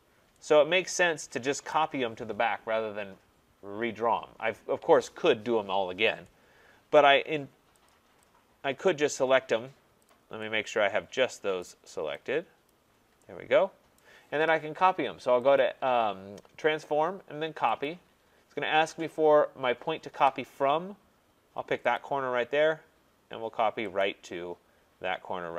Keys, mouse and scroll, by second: 1.7 right click, 7.0 right click, 7.9 click, 9.1 click, 10.1 click, 11.6 right click, 12.7 click, 14.0 right click, 15.6 click, 17.9 click, 22.0 click, 24.0 click.